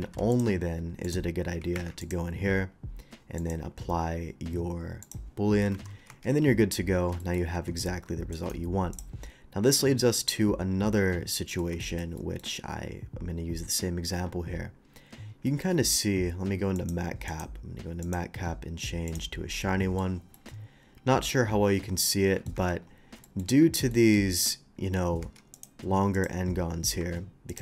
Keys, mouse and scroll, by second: 0.0 alt+v, 0.3 click, 1.0 click, 1.7 Escape, 2.0 click, 3.4 click, 5.0 click, 5.7 shift+2, 6.1 Tab, 7.2 middle click, 7.5 Tab, 8.3 right click, 8.9 click, 9.8-11.6 middle drag, 11.8 shift+middle drag, 12.1 shift+middle drag, 12.6 scroll up 1, 15.4 middle click, 16.7 click, 17.2 click, 18.0 click, 19.0 click, 19.6-19.9 middle drag, 20.3-22.4 middle drag, 22.5 Tab, 23.2 shift+middle click, 23.9 shift+middle click, 25.2 Tab, 25.5 click, 26.1 click, 27.5 click.